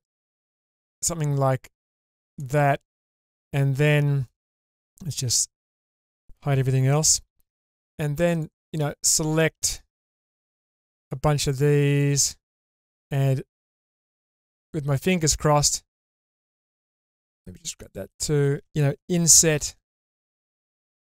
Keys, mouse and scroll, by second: 2.3 click, 2.7-4.3 middle drag, 5.3 /, 5.8 middle click, 7.6 3, 8.3 click, 8.7 middle click, 10.1 ctrl+shift+click, 10.7 middle click, 11.4 shift+click, 11.9 shift+click, 12.8 middle click, 14.3 shift+click, 14.9 shift+click, 15.3-17.0 middle drag, 17.5 shift+click, 18.1 shift+click, 19.5 i, 20.8 click.